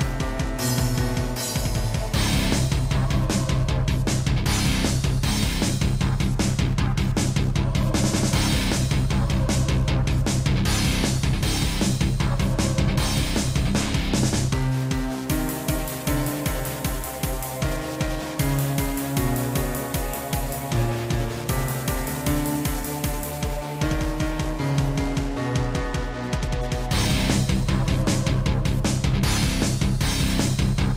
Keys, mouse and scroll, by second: 0.6 middle click, 0.7 scroll down 2, 0.8 scroll down 1, 1.4 shift+middle click, 2.5 shift+middle click, 3.9 click, 4.6 click, 5.6-6.1 typing, 6.2 Return, 7.6 click, 8.5 click, 9.2-10.6 typing, 11.2 shift+middle click, 11.7 shift+middle click, 12.2 shift+middle click, 13.1 scroll down 1, 13.5 ctrl+s, 26.6 shift+middle click, 27.6 click, 28.8 7, 29.9 scroll down 3, 30.3 scroll up 3.